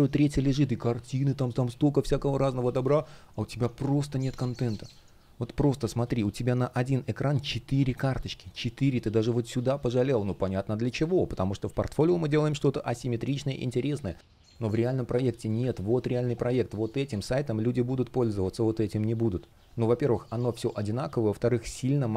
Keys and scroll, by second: 2.3 space, 11.3 super+r, 12.1 super+я, 14.0 space, 15.7 space, 17.9 space.